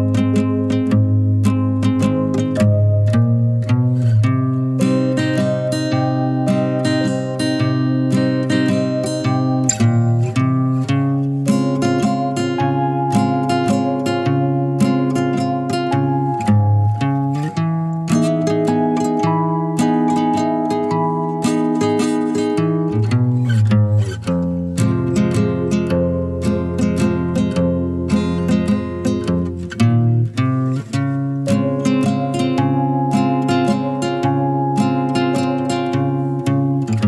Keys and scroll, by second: 12.7 5, 16.6 0, 22.8 typing, 24.3-24.7 typing, 26.8 typing, 32.4 typing, 34.5-35.9 typing.